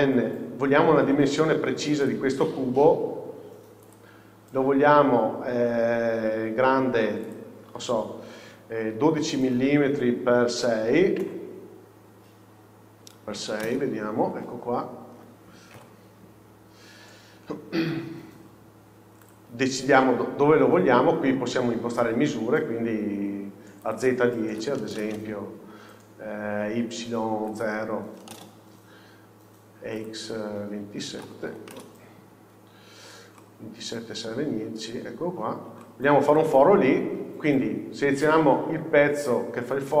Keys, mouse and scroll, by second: 2.1 click, 9.6-19.4 drag, 15.1 scroll up 1, 15.8 KP_1, 16.6 scroll up 1, 17.9 g, 25.1-33.4 drag, 28.4 KP_0, 32.9 scroll down 1, 33.4-40.0 middle drag, 37.2 scroll up 1, 38.5-40.0 scroll down 1.